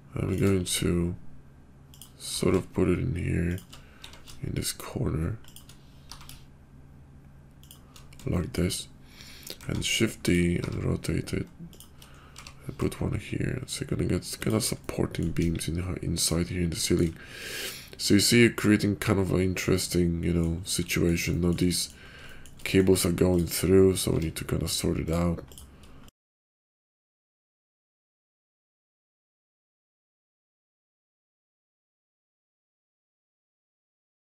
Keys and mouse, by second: 0.5 s, 2.2 g, 4.0 r, 6.1 g, 8.3 shift+click, 9.5 shift+d, 10.5 r, 12.3 g, 14.7-15.2 middle drag, 15.3 KP_5, 16.8 shift+middle drag, 17.3-20.4 middle drag, 20.9 middle click, 21.7 middle click, 22.6 middle drag, 24.1 Tab, 25.0 click, 25.4 click, 26.0 shift+click, 26.2 g, 28.4 click, 28.8 g, 29.5 middle click, 30.0 click, 30.3 middle click, 30.6 click, 30.9 g, 31.4 g, 31.9 click, 32.1 g, 33.1 click, 33.4-34.4 typing, 34.0 click.